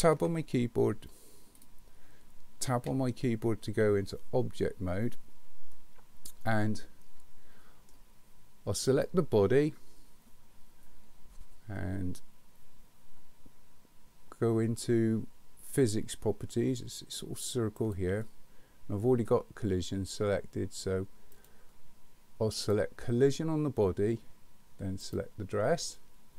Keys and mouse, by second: 0.1 `, 2.7 Tab, 5.7-7.9 middle drag, 21.4 click, 22.5 click, 25.0 click.